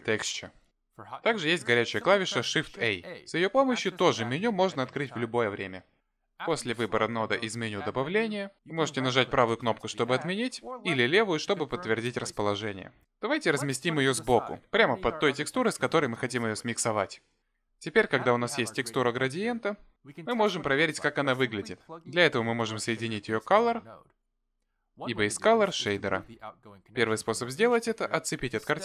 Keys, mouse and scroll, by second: 4.7 shift+a, 17.9 middle click, 28.6 ctrl+click.